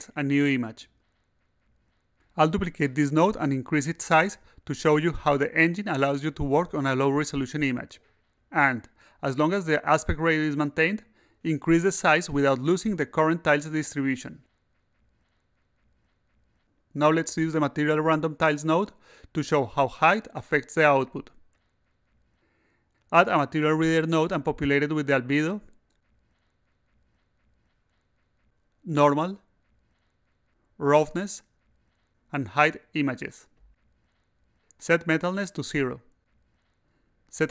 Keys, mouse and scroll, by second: 0.9 click, 1.2 click, 2.8 s, 3.4-4.9 drag, 6.3 click, 7.5 8, 8.0 0, 10.1-11.5 typing, 13.2 click, 13.4 click, 14.8 click, 15.1 click, 16.4 click, 16.6 click, 23.2 click, 24.8-26.6 drag, 27.2 click, 28.9-29.7 drag, 30.6-31.7 drag, 32.2-33.1 drag, 34.1 click, 36.3 click, 37.0 0.